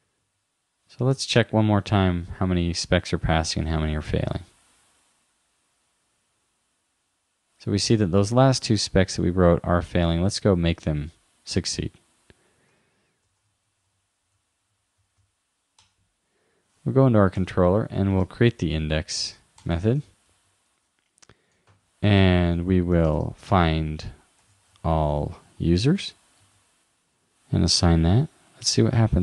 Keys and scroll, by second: 0.3 super+s, 1.1 super+r, 10.9 super+w, 12.7 super+t, 14.0 shift+-, 17.1 super+Right, 21.7 shift+2, 23.5 shift+f, 24.8 shift+9, 25.1 shift+;, 26.0 shift+0, 26.4 super+s.